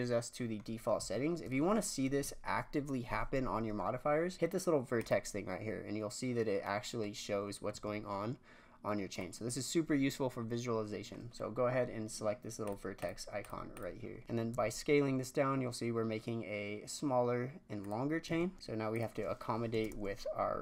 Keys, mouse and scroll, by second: 1.0 Tab, 1.5 Tab, 1.8-4.0 scroll up 1, 4.0-4.4 scroll up 2, 5.0 click, 6.6-7.7 middle drag, 7.7 s, 9.4-10.7 scroll up 1, 12.6 click, 13.0 click, 13.4 click, 13.7 click, 14.2 scroll up 1, 14.5 s, 18.2 Tab, 18.9-20.6 drag.